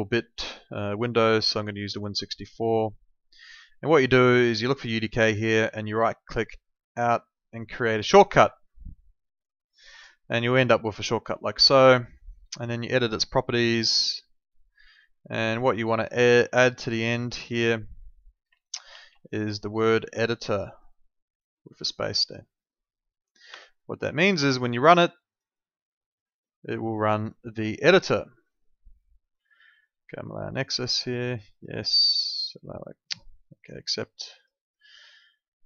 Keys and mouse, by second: 1.4 click, 4.6 click, 5.9 right click, 9.8 click, 11.8 right click, 13.4 click, 16.5 click, 18.9 ctrl+2, 23.5 Escape, 24.2 click, 34.3 click.